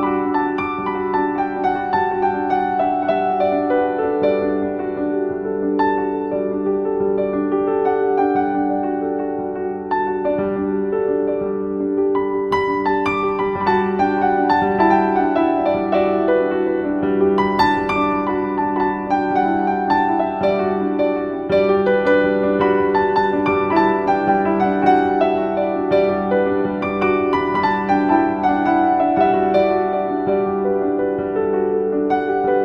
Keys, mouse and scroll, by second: 0.3-1.0 typing, 0.4 click, 1.1 click, 1.4-4.8 drag, 9.2-11.1 typing, 9.4 click, 10.4 click, 10.7 click, 11.9 click, 12.5 scroll down 1, 13.0-14.2 typing, 13.4 click, 14.3 click, 21.5 right click, 22.8 right click, 23.7-27.0 drag, 27.8-32.6 drag.